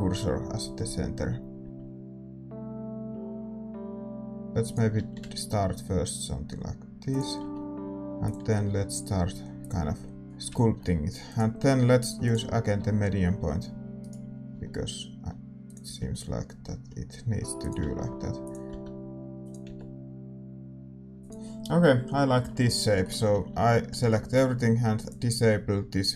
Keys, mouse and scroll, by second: 5.1 r, 7.4 g, 8.6 r, 9.8 g, 10.2-12.2 middle drag, 12.2-13.9 drag, 12.7 r, 14.5 s, 15.8 g, 17.9 r, 18.6 s, 19.6 g, 22.1-26.1 middle drag, 23.4 a.